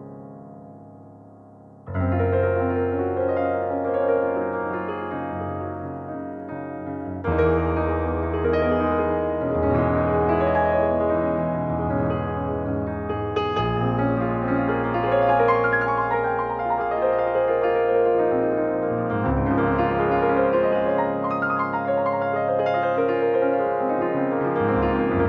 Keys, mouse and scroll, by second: 9.5 click, 13.2 click, 19.8 click, 23.7 click.